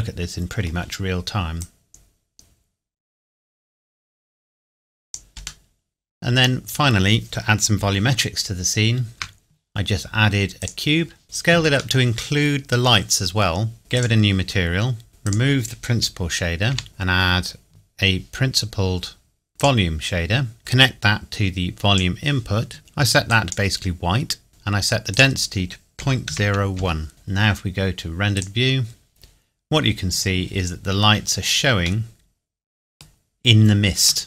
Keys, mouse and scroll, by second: 1.6 click, 5.7 middle click, 6.6-8.1 scroll down 1, 9.1 shift+a, 10.6 click, 12.0 middle click, 13.6 scroll down 1, 13.8 click, 14.7-15.1 scroll down 1, 15.1 scroll up 1, 15.3 click, 16.7 Delete, 16.9 shift+a, 19.6 click, 25.1 click, 26.0 KP_Decimal, 26.3 KP_0, 26.8 KP_1, 28.4 click, 29.5-31.3 scroll down 1, 31.7-32.1 scroll down 1, 32.1 middle click, 33.0 scroll down 1.